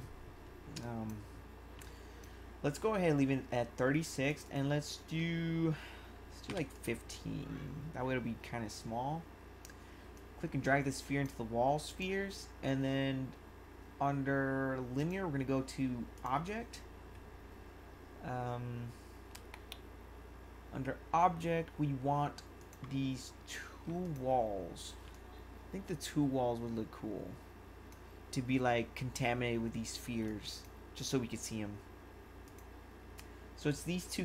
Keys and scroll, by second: 0.7 1, 1.8 1, 6.4 5, 25.0 1.